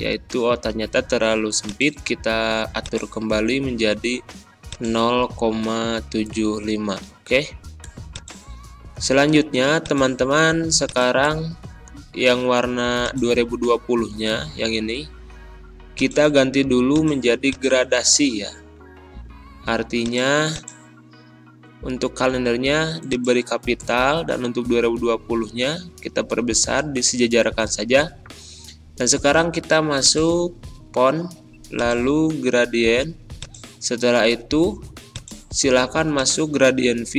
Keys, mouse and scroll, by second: 1.6 click, 23.1-23.8 typing, 29.9 click, 34.1-35.0 typing, 34.1 click.